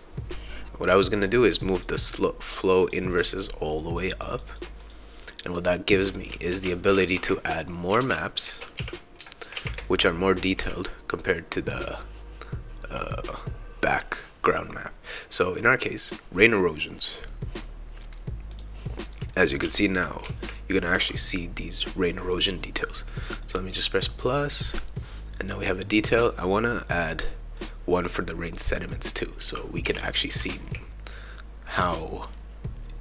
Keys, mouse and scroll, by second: 1.2 click, 2.8 click, 3.9 click, 4.5 click, 4.8 click, 5.9 right click, 6.0-9.5 typing, 9.0-13.4 right drag, 10.6 s, 16.0 click, 18.5 click, 19.3-21.9 right drag, 19.6 s, 20.2 e, 20.9 w, 23.4 click, 26.0 click, 27.6 click, 28.4-31.8 right drag, 29.2-31.2 typing, 32.4-33.0 right drag.